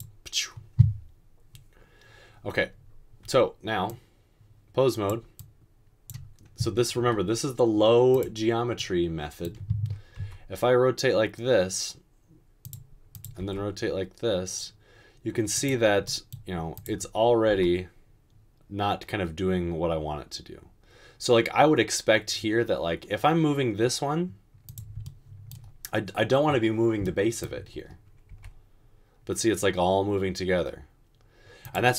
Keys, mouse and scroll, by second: 10.4 typing, 13.4 typing, 17.7 typing, 28.4 r.